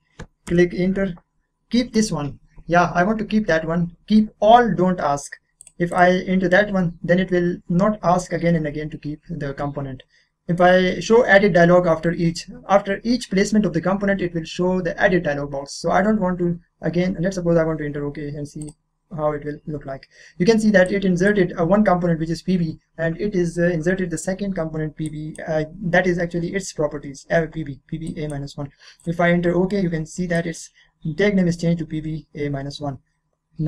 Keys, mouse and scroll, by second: 0.5 Return, 5.6 click, 18.6 click, 20.8-24.0 drag, 25.0 click, 25.2-28.0 drag, 28.0 click.